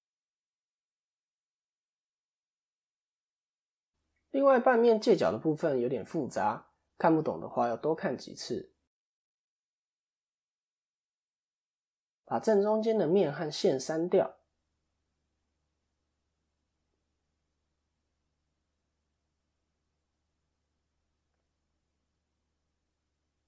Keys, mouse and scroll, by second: 0.0 KP_1, 0.8 scroll down 1, 1.4 scroll down 3, 1.5 shift+middle click, 2.3 KP_7, 3.0-3.7 scroll up 3, 4.4 scroll up 1, 5.8 Tab, 7.2 click, 8.7 middle click, 11.3-11.7 scroll up 2, 11.7 shift+middle click, 12.2 click, 13.1 x, 14.2-14.6 scroll up 2, 14.6 middle click, 16.5 2, 16.7 click, 17.7 x, 20.7 middle click, 21.7 KP_7, 22.3-23.2 scroll down 3, 23.2-23.4 scroll down 2, 23.2 1.